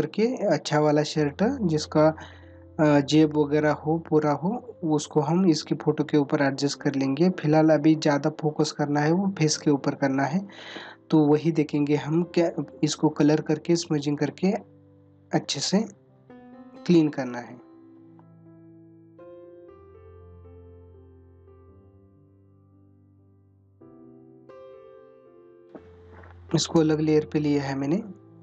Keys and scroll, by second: 12.5 ctrl+=, 19.2 space, 23.4 ctrl+-, 28.2 ctrl+-.